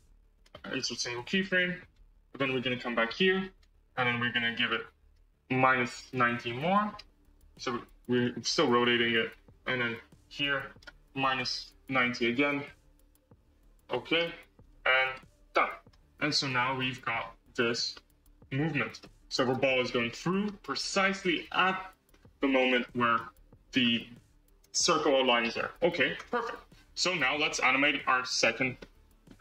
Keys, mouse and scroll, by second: 0.2-1.8 right drag, 1.8-4.3 drag, 4.5-7.0 drag, 8.0-9.8 right drag, 9.8-13.9 drag, 14.5-15.7 right drag, 15.7 space, 17.9-18.6 middle drag, 18.6-18.9 scroll down 6, 18.9-20.6 middle drag, 20.6-21.1 scroll up 7, 21.1-22.6 middle drag, 22.6-23.0 scroll down 5, 23.0-25.4 middle drag, 26.1 space, 28.2 click, 28.7-29.4 middle drag.